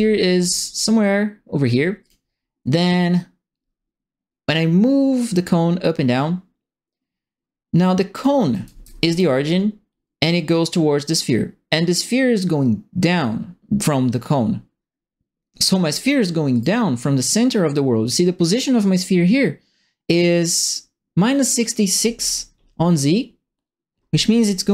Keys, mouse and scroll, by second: 2.0 click, 2.8-8.2 drag, 8.3-9.1 typing, 8.5 right click, 16.5 click.